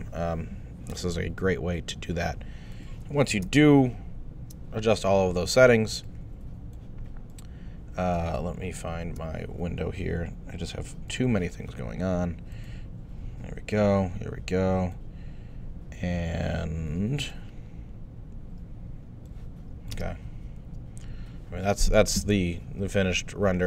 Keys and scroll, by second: 3.5 super+Tab, 19.9 space.